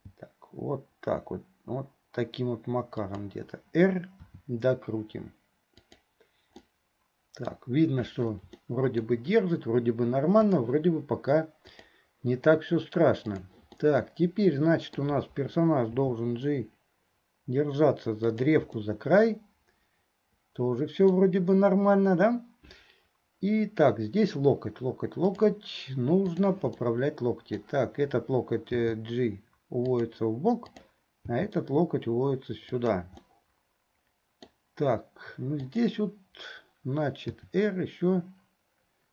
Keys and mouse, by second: 6.8 middle click, 8.6 shift+click, 8.6 shift+middle click, 8.6 shift+right click, 10.6 click, 11.7 click, 13.4 click, 13.8-15.2 middle drag, 19.0-21.4 middle drag, 26.4 click, 26.9 middle click, 30.9 click, 33.3-34.7 middle drag, 35.8 click, 37.5 r.